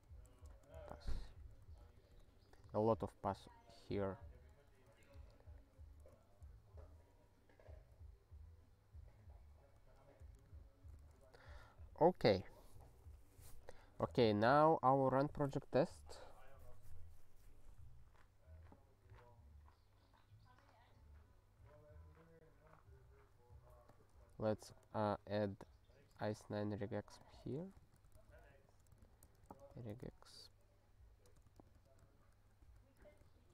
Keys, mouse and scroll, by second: 0.5-1.8 typing, 2.0 alt+b, 2.1 alt+b, 2.2 alt+b, 2.4 alt+b, 2.9 alt+b, 4.5 alt+u, 5.0 alt+f, 6.2 alt+f, 6.8 alt+f, 7.1 alt+f, 10.4 ctrl+/, 11.0 ctrl+s, 15.0 scroll up 3, 17.9-18.5 scroll up 1, 18.5-23.0 scroll up 1, 23.0-23.9 scroll down 3, 23.9 click, 24.0 click, 25.9 alt+<, 27.2 click, 27.6 ctrl+a, 27.8 ctrl+/, 28.0 ctrl+n, 28.1 Return, 28.3 ctrl+p, 28.5 ctrl+y, 29.0 alt+b, 29.2-31.4 typing, 31.7 ctrl+g, 32.0 ctrl+n, 32.2 ctrl+a, 32.6 ctrl+k, 33.0 Return, 33.3 ctrl+s.